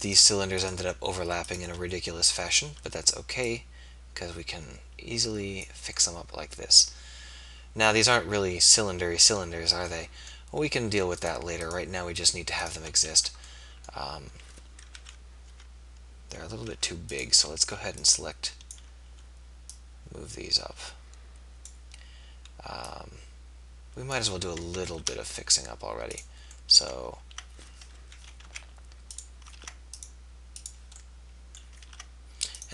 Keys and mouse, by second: 5.4 right click, 6.2-7.7 middle drag, 13.1 a, 15.0 KP_3, 15.8 b, 17.4 z, 17.6 b, 24.9 ctrl+r, 28.0 KP_3, 28.6 z, 29.6 ctrl+r, 32.0 ctrl+r.